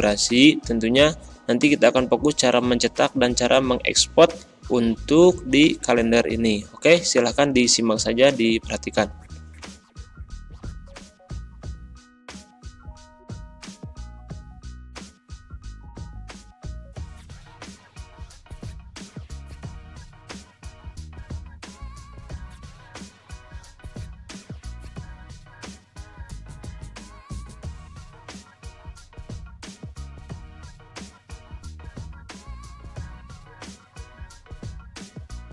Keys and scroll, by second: 2.7 ctrl+z, 5.9 ctrl+], 8.0 ctrl+z, 10.1 Up, 11.1 Delete, 11.7 BackSpace, 20.9 ctrl+a, 21.2-21.9 typing, 26.0 Return, 26.5-27.6 typing, 27.4 Home, 28.7 ctrl+a, 29.8 BackSpace, 30.6 w, 30.7 ., 32.3 shift+F3, 32.8 c, 32.8 a, 32.9 i, 33.0 Return, 34.2 ctrl+a, 34.4 ctrl+e.